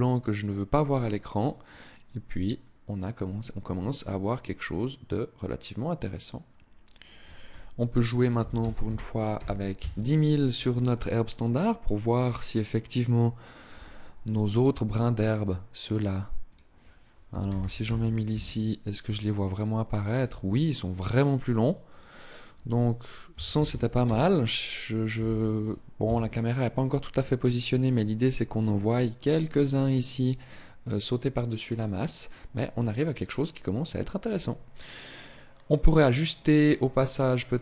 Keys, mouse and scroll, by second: 1.7 click, 5.9 click, 15.1 click, 21.7 click, 34.9 click.